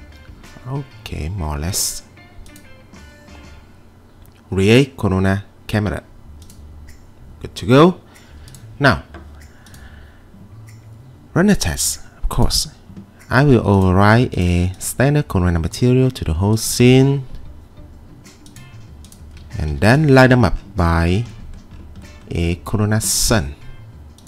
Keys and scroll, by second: 19.7 t.